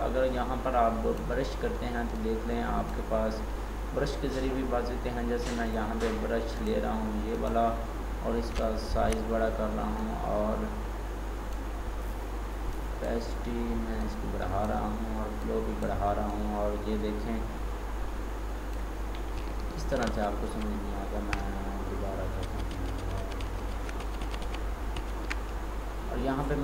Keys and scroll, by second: 20.2 ctrl+d, 22.3 ctrl+shift+z, 24.1 ctrl+z.